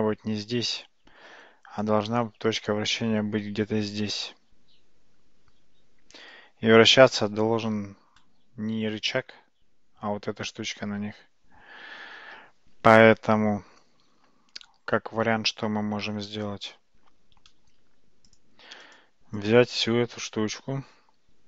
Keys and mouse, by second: 18.4 click.